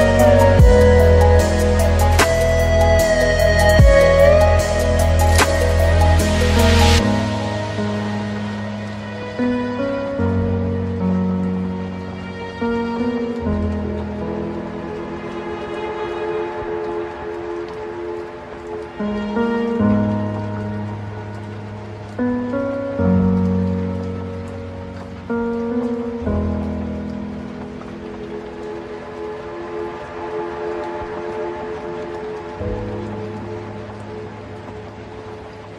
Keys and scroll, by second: 8.4 ctrl+alt+space, 16.6 ctrl+i, 17.5 ctrl+space, 27.2 ctrl+alt+space, 33.1 ctrl+space, 35.2 ctrl+z.